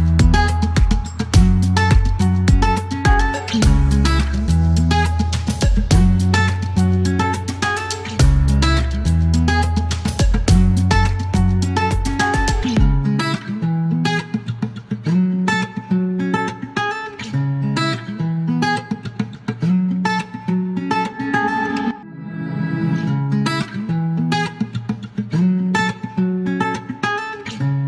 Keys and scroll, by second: 0.2 KP_6, 0.2 Return, 2.0 Delete, 3.6 Delete, 4.0 shift+s, 4.9 alt+u, 5.0 alt+n, 6.5 alt+m, 6.6 alt+s, 8.4 alt+k, 8.9 space, 10.3 alt+k, 10.4 alt+l, 10.7 space, 11.1 space, 16.6 KP_1, 16.7 KP_3, 17.0 KP_1, 17.1 KP_3, 17.2 Return, 20.1 c, 20.3 space, 21.7 s, 24.8-26.2 typing, 27.6-27.8 typing.